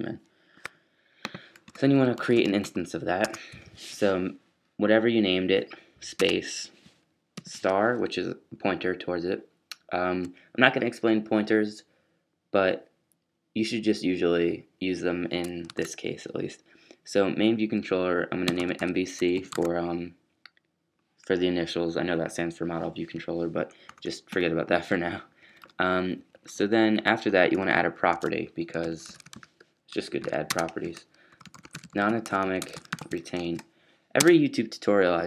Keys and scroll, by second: 0.0-0.8 typing, 2.2-2.6 typing, 3.2 shift+Tab, 7.1-7.8 typing, 15.7 super+s, 18.4-20.0 typing, 22.3 typing, 25.3 fn+Down, 25.5 BackSpace, 25.6 BackSpace, 26.1 Down, 26.3 Down, 27.7 Up, 28.1-34.6 typing.